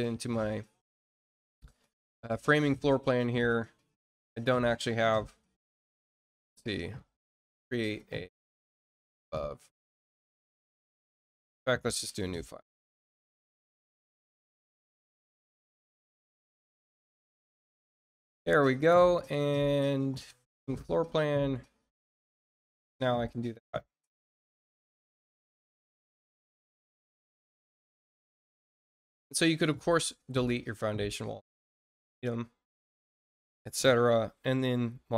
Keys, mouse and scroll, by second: 2.3 click, 3.5-4.1 scroll down 4, 4.2 click, 5.3 middle click, 6.3 click, 6.8 middle click, 7.2 scroll down 1, 9.1 click, 9.8 click, 10.5-11.1 scroll down 2, 14.1 click, 17.5 click, 19.1 click, 20.8 click, 21.5 scroll up 1, 22.1 middle click, 23.3 click, 27.1 click, 28.2 click, 29.6 scroll up 2, 30.3 click, 31.4-32.5 drag, 33.0 scroll down 2.